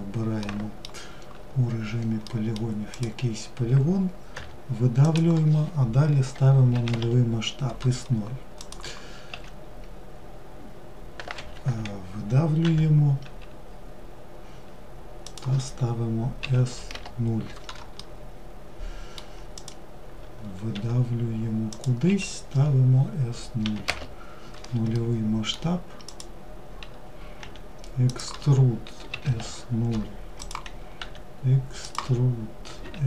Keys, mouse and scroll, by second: 2.1 click, 7.8 click, 17.2-18.8 middle drag, 18.8 click, 24.1-25.2 middle drag, 25.2 click, 29.6 click.